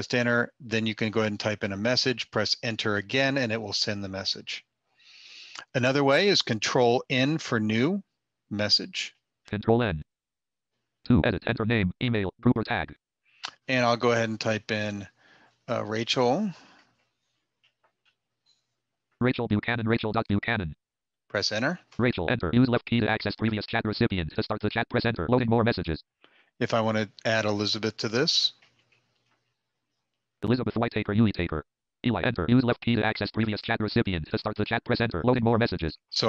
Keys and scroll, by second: 6.0 ctrl+n, 9.1 ctrl+n.